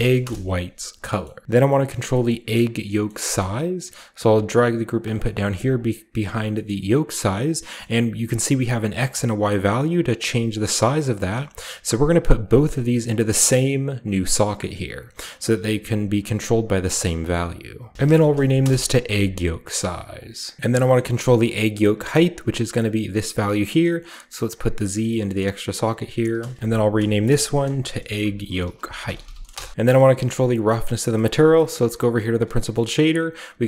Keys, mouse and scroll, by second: 0.0-0.1 typing, 0.8-1.4 scroll down 1, 0.9 middle click, 1.7 middle drag, 2.1 middle click, 2.9 middle click, 3.2 middle click, 3.6 click, 3.9 g, 4.8 click, 5.2-6.3 scroll up 1, 5.3 g, 5.5 drag, 6.3-8.9 scroll up 1, 8.9-10.0 shift+scroll up 1, 8.9-10.0 shift+drag, 10.1 shift+click, 11.0-15.8 shift+drag, 17.9-20.5 typing, 19.6 middle click, 20.0 click, 20.5 scroll down 1, 20.8 scroll up 1, 21.9-23.6 drag, 23.4 right click, 24.3 click, 26.2 click, 26.6 ctrl+v, 26.6-30.2 typing, 27.4 click, 29.7 click, 30.7-31.6 scroll down 1, 31.0 middle click, 31.6-32.3 middle drag, 31.6-32.5 scroll up 1, 32.2 drag, 32.5 typing, 32.8 scroll up 1.